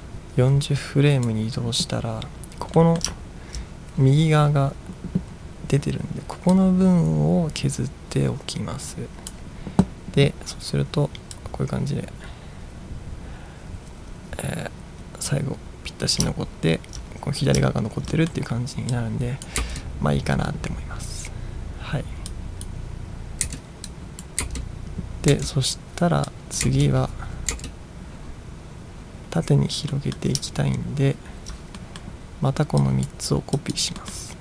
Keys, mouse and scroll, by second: 2.8-3.2 middle drag, 3.3-4.1 ctrl+scroll up 3, 6.8-9.5 drag, 11.5-16.2 drag, 16.5-17.0 ctrl+scroll down 1, 17.7-18.0 ctrl+scroll down 1, 18.2 middle drag, 19.1 click, 19.9 space, 22.4-22.7 drag, 23.5 space, 24.0 click, 24.5 space, 25.4 space, 26.4 click, 26.8 space, 27.6 space, 29.9 middle drag, 30.9 ctrl+scroll up 1, 31.2-31.8 ctrl+scroll down 2, 31.8 middle drag, 32.9-33.4 drag, 33.6 drag, 34.1 middle click.